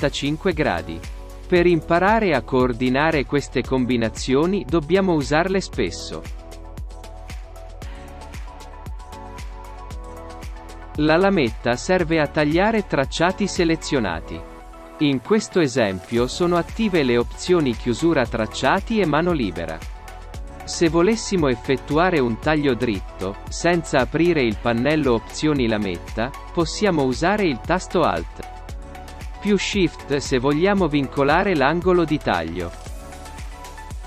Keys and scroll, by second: 10.8 ctrl+alt+shift+space.